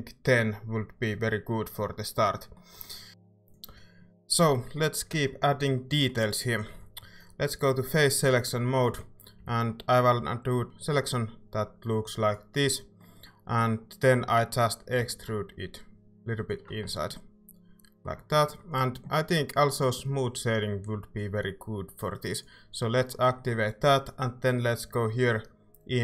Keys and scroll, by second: 9.4 c, 15.0 e, 16.8 Tab.